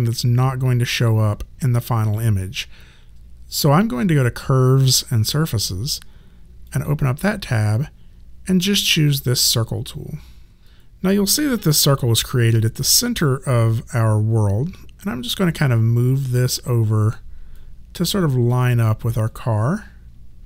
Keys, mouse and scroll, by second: 6.7 click, 15.3 click, 17.5 alt+click.